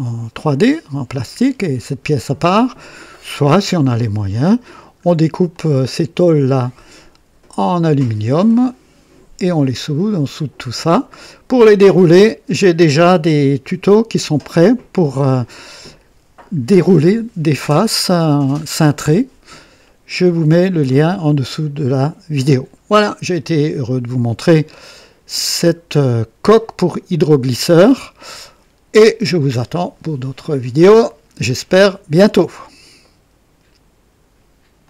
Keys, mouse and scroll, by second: 2.9-4.3 drag, 5.4-11.7 drag, 17.8-19.8 drag, 21.8-22.7 drag, 23.0 click, 24.4 scroll up 2, 24.9-25.5 right drag, 25.7 scroll down 1, 26.4-27.5 right drag, 32.9 right click, 34.7 click.